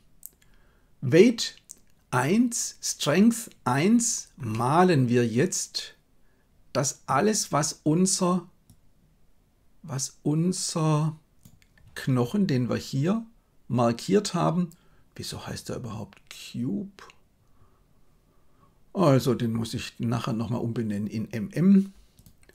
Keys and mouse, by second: 4.4-7.0 middle drag, 8.7-11.4 drag, 22.3-22.5 drag.